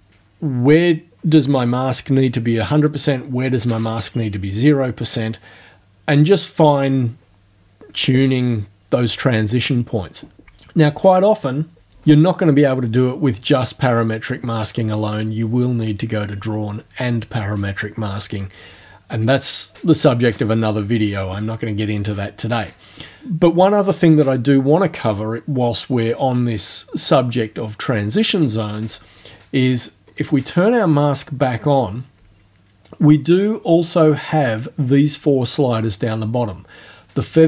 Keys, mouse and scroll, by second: 30.1 click.